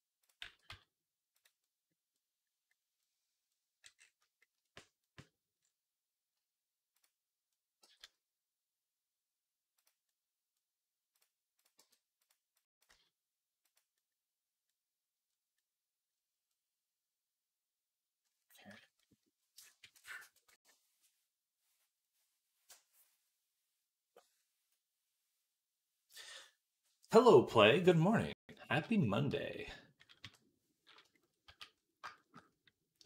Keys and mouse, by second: 0.3 g, 7.7 g, 11.6 g, 12.7-33.0 middle drag, 12.7 g, 19.5 KP_3, 30.1 KP_3, 31.3 z.